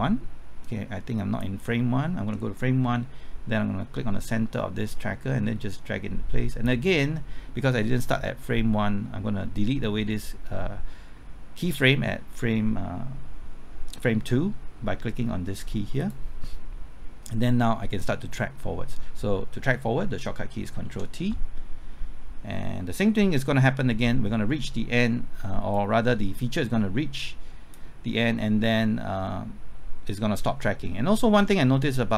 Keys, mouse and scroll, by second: 19.3 typing, 20.8 ctrl+t, 25.7-32.1 drag.